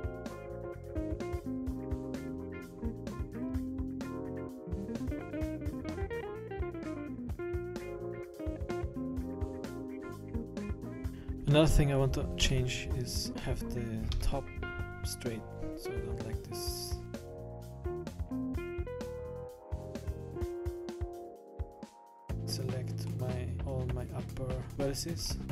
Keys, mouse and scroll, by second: 1.0 scroll down 3, 1.1-1.8 scroll up 2, 1.6 b, 2.1-2.8 scroll up 2, 2.3 b, 2.8 scroll down 2, 2.9 scroll up 2, 3.1 b, 3.5 scroll down 5, 3.6 scroll up 1, 3.8 s, 5.3 scroll up 5, 5.5 scroll down 3, 5.6 scroll up 1, 5.7 scroll down 1, 5.9 scroll up 1, 6.1 middle click, 6.5 middle click, 7.5 Tab, 7.8 middle click, 9.3 middle click, 9.9 scroll down 1, 10.0 scroll up 8, 10.2 Tab, 10.3-10.8 scroll down 5, 10.4 middle click, 10.6 middle click, 10.8 scroll up 1, 11.0 scroll down 1, 11.4 middle click, 12.4 KP_1, 13.1-13.6 scroll down 3, 13.5 middle click, 13.5-13.9 scroll up 4, 14.1 KP_1, 17.5 scroll down 3, 17.6 middle click, 17.8-18.4 scroll up 8, 18.2 middle click, 18.6 KP_1, 18.8 scroll down 6, 19.6 scroll down 2, 19.7 scroll up 1, 19.8 middle click, 20.3 scroll down 1, 20.5 middle click, 20.7 KP_1, 21.1 scroll down 2, 21.8 a, 21.9 a, 21.9 b, 23.0 middle click, 24.7-25.3 scroll up 6, 25.3 middle click, 25.4-25.5 scroll down 6, 25.4 KP_1.